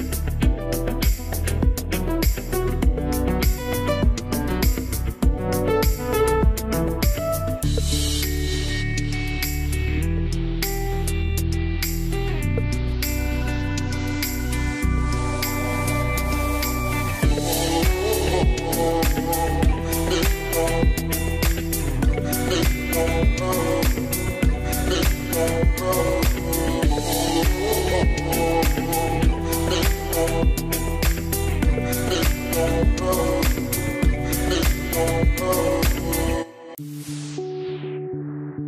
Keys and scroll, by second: 15.4 Delete, 33.2 alt+q.